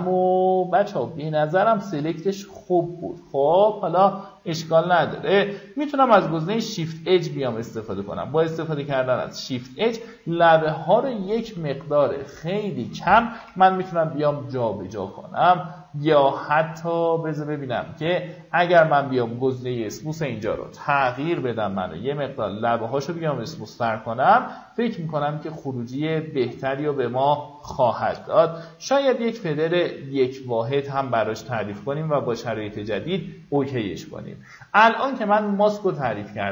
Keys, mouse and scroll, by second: 10.5-10.9 alt+scroll down 1, 11.9 click, 13.0 ctrl+0, 21.4-27.5 drag, 27.6 KP_1, 31.3 click.